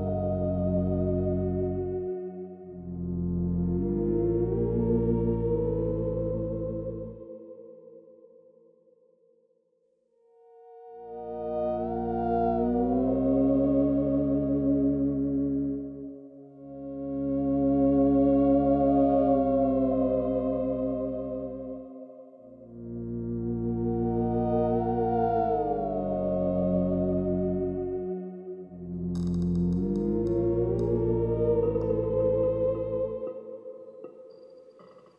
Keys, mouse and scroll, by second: 3.3 click, 4.6 click, 10.1 click, 11.6 click, 12.5 click, 21.1 click.